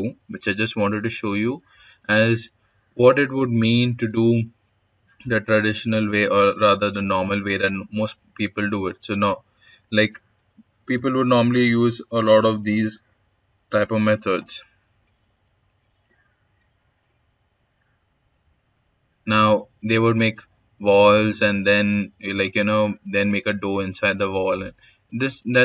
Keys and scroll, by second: 24.9 s.